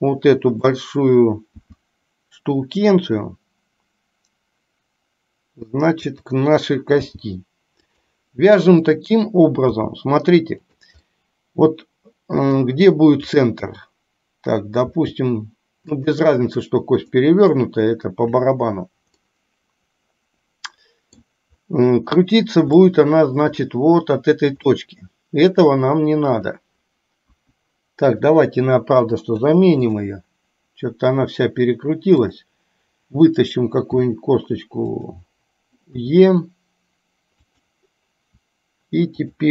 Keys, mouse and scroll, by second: 1.6 s, 7.1 g, 9.7 g, 11.2-12.5 middle drag, 12.5 scroll down 1, 13.4 click, 14.9 g, 17.2 middle click, 19.2-21.2 middle drag, 22.9 shift+middle click, 24.9 middle click, 25.6 scroll down 1, 26.5 click, 27.4 KP_1, 29.1 Delete, 34.0 r, 36.0 e, 39.2 click.